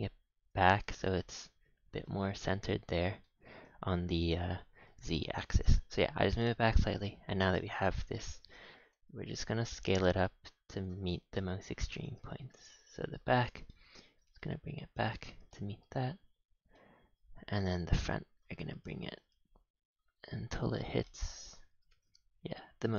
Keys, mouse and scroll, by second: 3.2-3.5 middle drag, 6.9 click, 11.1 middle click, 13.8 shift+middle click, 14.0 g, 15.2 scroll down 1, 15.5 middle click, 16.5 middle click, 16.5 scroll down 1, 17.1 middle click, 21.0 middle click, 21.5 scroll up 7, 21.7 g.